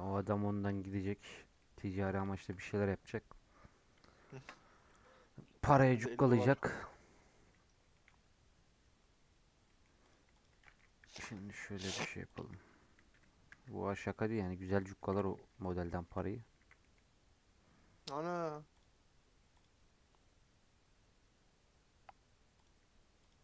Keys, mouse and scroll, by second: 0.1 Tab, 0.2-0.9 scroll down 6, 0.4 middle drag, 0.9 scroll up 6, 1.2-1.5 scroll down 6, 1.5-10.0 middle drag, 10.0 click, 10.3 click, 10.4 g, 12.3 click, 13.1 g, 14.8 click, 15.0 g, 15.8-16.5 shift+middle drag, 16.5 a, 16.7-17.2 middle drag, 17.2-19.3 scroll down 2, 19.3-19.6 scroll down 1, 19.7-23.4 drag.